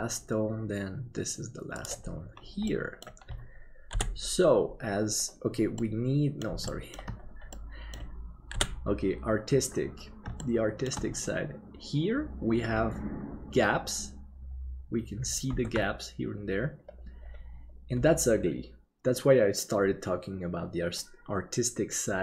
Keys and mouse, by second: 2.8 middle click, 3.9 KP_7, 5.9 middle click, 6.8 shift+middle click, 7.6 middle click, 8.5 KP_7, 10.5 shift+middle click, 15.7 ctrl+s.